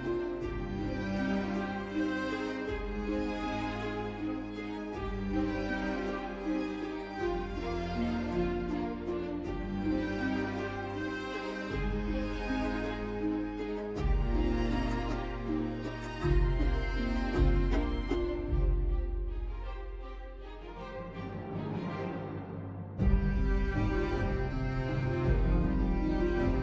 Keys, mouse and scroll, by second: 0.5-2.0 typing, 3.9-7.4 typing, 4.4 Return, 7.7 Tab.